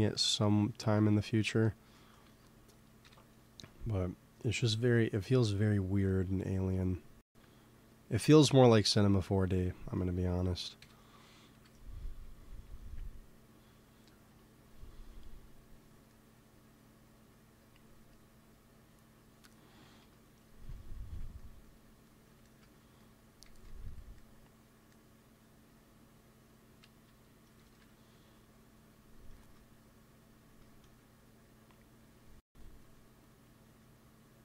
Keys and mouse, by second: 1.0 middle click, 2.2 ctrl+s, 2.9 KP_1, 10.7 KP_1, 11.4 KP_3, 19.9 KP_3, 23.3 g, 23.6 f, 25.0 click, 25.7-27.4 drag, 27.0 KP_3, 27.6 ctrl+z, 28.6-30.1 drag, 29.5 ctrl+z, 33.1-34.4 drag.